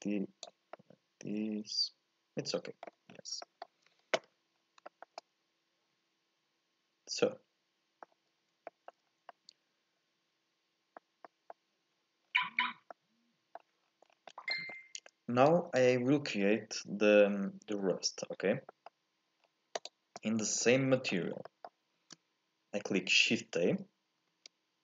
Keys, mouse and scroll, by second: 0.7-3.1 middle drag, 3.1-3.4 scroll down 1, 3.4-4.5 middle drag, 4.5-4.9 scroll down 1, 4.9-8.2 shift+middle drag, 8.4-8.7 scroll up 2, 8.7 shift+middle click, 9.0 scroll down 1, 9.3-11.0 middle drag, 11.0 scroll up 1, 11.2-12.2 middle drag, 12.2-12.9 scroll down 5, 12.9 middle click, 13.8 scroll down 2, 14.1 scroll up 3, 14.3 middle click, 14.7-15.5 scroll up 3, 15.5 click, 18.7 middle click, 19.4 scroll down 1, 19.8 click, 20.2-21.3 middle drag, 21.3 scroll up 2, 21.5 middle click, 21.9 shift+a, 24.3 shift+a.